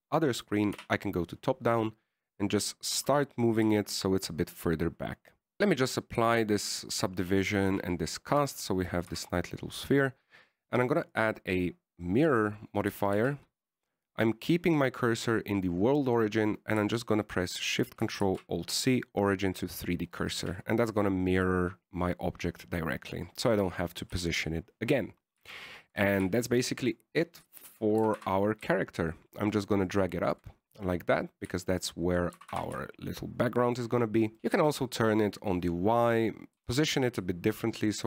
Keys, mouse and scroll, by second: 2.1 KP_7, 4.3 g, 6.0 click, 8.6 ctrl+a, 9.0 ctrl+a, 9.7 Tab, 10.4 Tab, 12.4 click, 14.4 shift+s, 19.5 ctrl+alt+shift+c, 21.7 a, 24.3 middle click, 25.4 KP_1, 27.4 right click, 27.8 shift+right click, 28.1 shift+right click, 28.5 shift+middle click, 29.3 g, 31.4-32.4 shift+scroll up 2, 31.5 shift+middle click, 32.4 scroll up 1, 32.6-32.9 scroll down 2, 32.9 shift+middle click, 33.7 g, 34.4 KP_1, 35.6 r, 37.9 r.